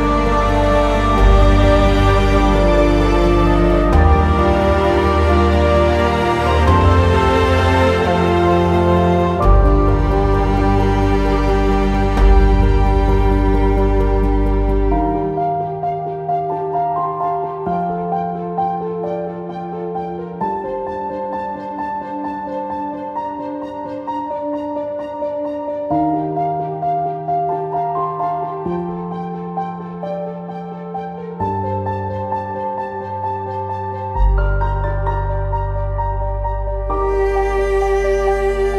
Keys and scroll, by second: 23.1 q, 25.4 w.